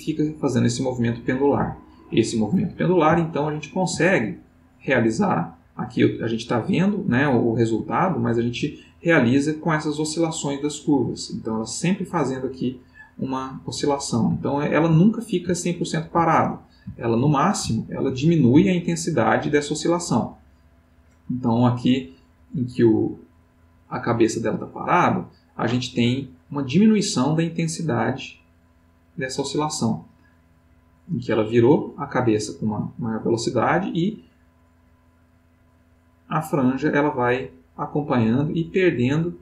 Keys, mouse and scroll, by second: 2.6-4.1 middle drag, 4.9 click, 5.5 click, 6.6-7.9 middle drag, 13.8 middle click, 14.4-15.5 ctrl+middle drag, 16.5-18.2 ctrl+middle drag, 19.0-26.6 drag, 30.3-39.4 drag.